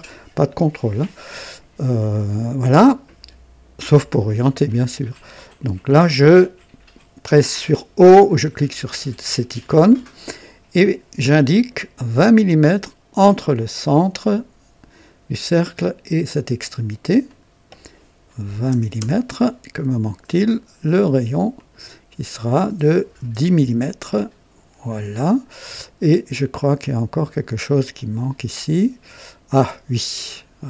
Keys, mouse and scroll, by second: 8.7 o, 11.1 click, 13.6 click, 17.2 click, 18.5 KP_2, 18.6 KP_0, 18.9 Return, 18.9 Return, 20.2 click, 21.5 click, 23.0-24.2 typing, 24.0 click, 27.9-30.4 drag.